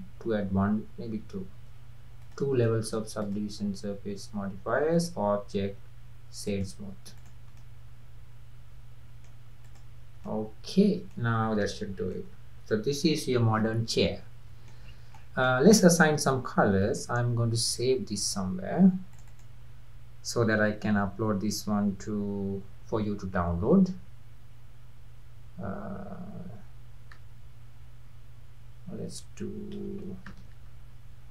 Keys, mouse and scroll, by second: 1.5 ctrl+2, 2.2 click, 2.7-3.2 middle drag, 3.2 click, 5.0-7.3 drag, 7.6-9.7 middle drag, 9.7 click, 10.3-10.9 middle drag, 10.9 scroll down 3, 11.1-11.9 middle drag, 11.9 scroll down 1, 12.1-14.9 middle drag, 14.9 scroll up 2, 15.2-17.6 middle drag, 17.6 ctrl+s.